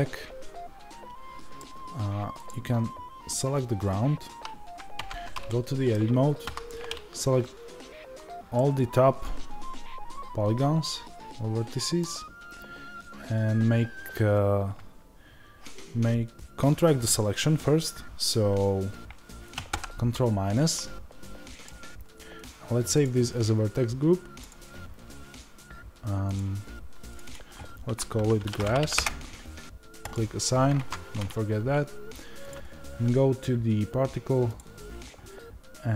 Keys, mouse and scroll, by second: 2.4 click, 4.9 Tab, 5.4-26.3 middle drag, 6.3 a, 19.6 ctrl+KP_Subtract, 26.3 click, 30.0 click, 30.7 Tab, 30.7-35.9 drag.